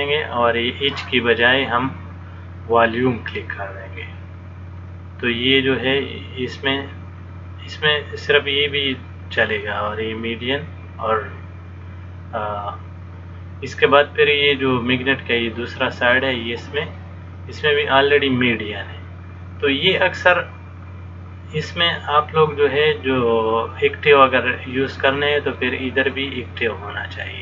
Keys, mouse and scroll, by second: 16.3 click, 26.3 click.